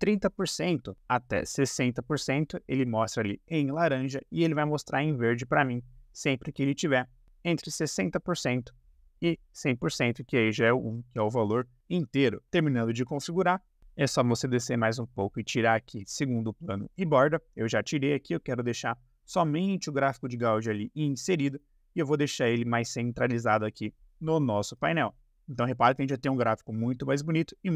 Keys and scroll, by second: 0.0-0.2 typing, 1.3-3.1 typing, 7.0-8.2 typing, 10.2 BackSpace.